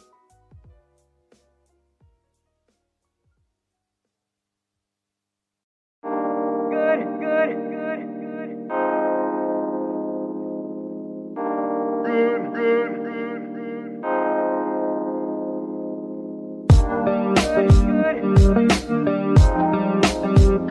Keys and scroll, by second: 2.7 r, 3.0 x, 3.3 z, 3.6 z, 6.7 Escape, 7.8 g, 10.7 alt+g, 11.3 r, 11.7 g, 12.6 Escape, 13.2 r, 13.4 r, 16.1 g, 17.2 Escape, 17.9 g, 18.9 Escape.